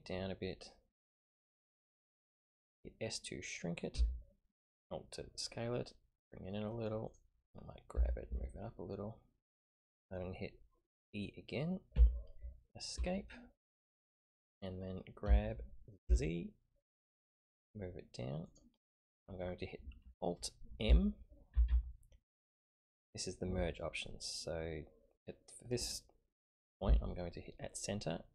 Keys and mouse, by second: 3.9 s, 7.9 g, 11.9 e, 15.2 g, 21.5 alt+m.